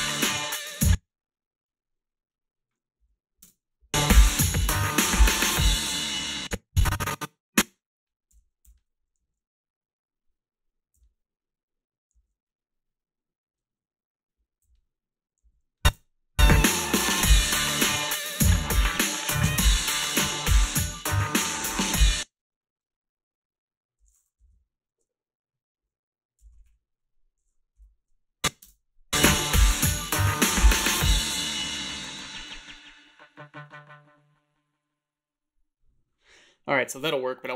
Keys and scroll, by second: 0.7 space, 3.0 a, 3.4 space, 4.4 a, 6.2 space, 8.3 g, 8.6 h, 9.2 a, 11.0 h, 12.1 a, 14.6 h, 15.5 a, 15.8 space, 19.1 Delete, 20.1 Delete, 21.9 space, 24.5 =, 26.6 ,, 26.6 ,, 28.6 space.